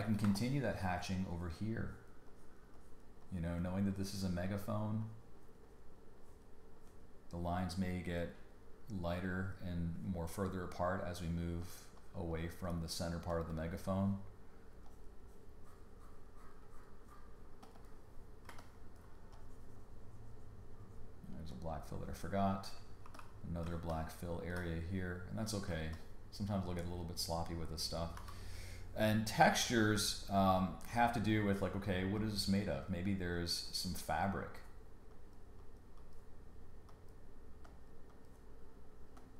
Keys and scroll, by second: 0.2 space, 18.5 space, 23.0 g, 23.6 space, 25.7 space, 28.1 b.